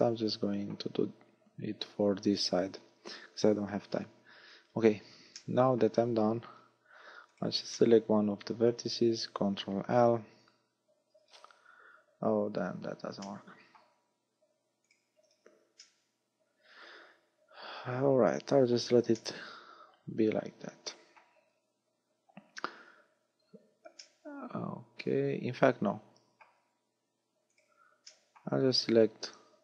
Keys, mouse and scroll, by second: 0.0 middle click, 3.3-4.4 scroll up 2, 4.4-4.8 scroll down 5, 5.4 middle click, 6.6-7.0 scroll down 2, 7.4 right click, 7.8 shift+middle click, 9.0 scroll up 3, 10.4 ctrl+l, 11.3 scroll down 4, 12.5 scroll up 4, 13.3 middle click, 14.9 right click, 15.4 a, 15.8 middle click, 19.2 middle click, 21.5 scroll down 5, 22.8-23.4 scroll up 9, 24.1 middle click, 27.6 right click, 28.2 shift+middle click, 29.0-29.5 scroll up 6.